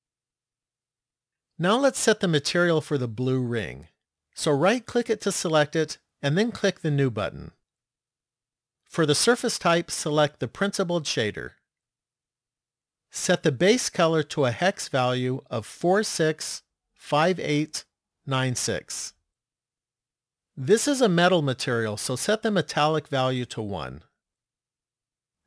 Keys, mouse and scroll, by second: 0.8 click, 4.7 right click, 6.8 click, 8.7 click, 12.9 click, 23.2 click.